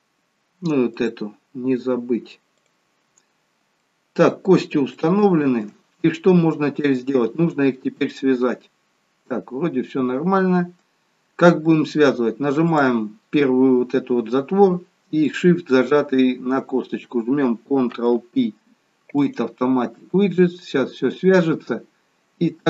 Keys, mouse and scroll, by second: 0.9 click, 3.2 click, 3.2-3.7 scroll down 1, 3.7 middle click, 5.0 shift+middle click, 6.2-6.9 scroll down 2, 7.2 scroll up 1, 8.2 middle click, 11.0-11.6 scroll up 1, 11.6-12.1 scroll up 1, 12.6 click, 15.3 shift+click, 17.9 ctrl+p.